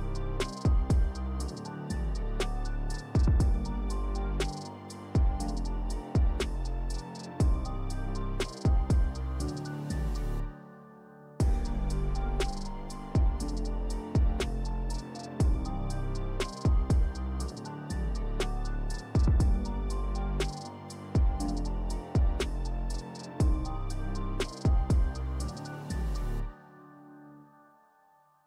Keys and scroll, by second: 8.5 3, 9.7 5, 11.3 s, 12.9 s, 14.0 2, 18.1 s, 20.9 3, 26.0 alt+e, 26.3 s.